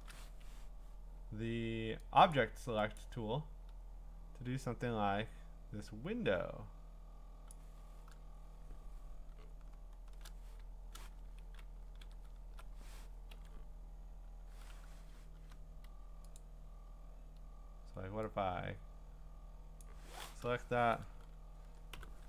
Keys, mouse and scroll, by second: 0.4 Escape, 2.3 click, 3.0 click, 7.5 click, 8.3 scroll, 9.4-10.5 scroll, 10.5 middle click, 10.7 middle click, 10.9 middle click, 11.9 ctrl+d, 16.4 click, 19.8 click, 21.9 ctrl+j.